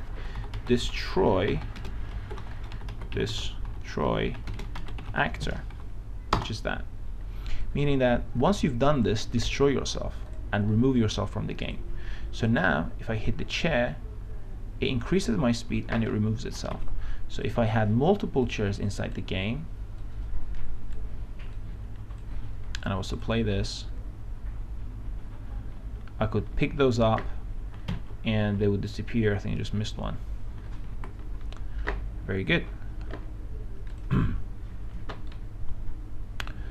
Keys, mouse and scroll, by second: 0.2-5.2 typing, 2.7 ctrl+BackSpace, 7.9-10.3 drag, 13.2 w, 13.7 w, 17.7 click, 24.3-25.0 w, 34.3 click, 35.6-36.7 right drag.